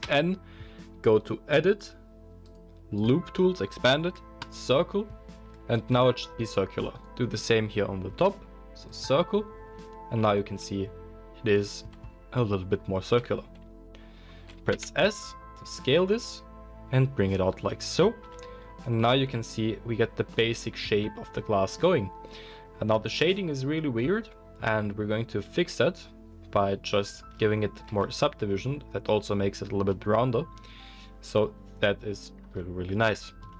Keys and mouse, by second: 0.0-1.7 middle drag, 0.0 n, 1.7 click, 1.8-2.5 middle drag, 2.5-17.8 drag, 6.9 alt+middle click, 6.9 alt+right click, 14.7 s, 17.8-33.5 middle drag, 18.2 Tab, 27.8 ctrl+2, 33.0 KP_1.